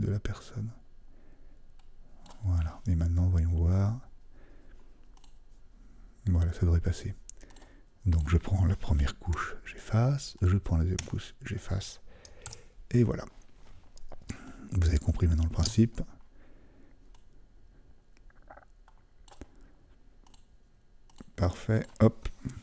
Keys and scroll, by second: 12.4 super+d.